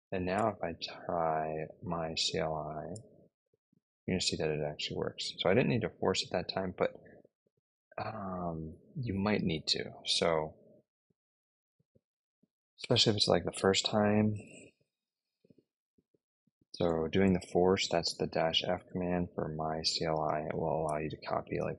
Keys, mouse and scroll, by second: 0.0-2.4 typing, 2.8 Return, 15.7-17.4 typing, 18.8-21.7 typing.